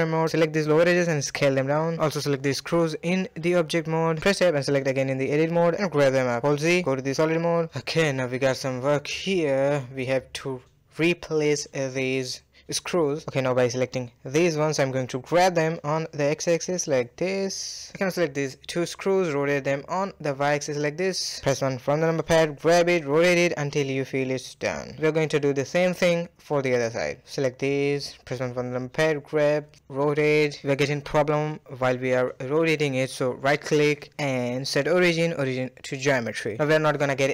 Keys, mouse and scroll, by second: 0.0 s, 1.6 click, 2.9 Tab, 4.2 g, 4.8 KP_Decimal, 5.3 Tab, 5.7 z, 6.4 scroll down 2, 6.6-7.8 middle drag, 7.8 scroll down 1, 8.1-10.6 middle drag, 10.6 click, 11.0 shift+click, 11.7 shift+click, 11.9-13.6 middle drag, 13.6 shift+click, 14.2-14.7 middle drag, 14.7 g, 16.7 shift+middle drag, 17.0-17.7 scroll up 1, 17.7 click, 18.5 shift+click, 18.7 r, 21.1 middle click, 21.1 KP_1, 21.5 g, 22.4 r, 23.9 g, 25.7-26.4 shift+middle drag, 26.4 click, 26.9-27.7 middle drag, 27.7 shift+click, 28.4 KP_4, 28.8 g, 29.9 r, 31.0 g, 32.1 r, 33.3-36.3 right drag, 36.6 r.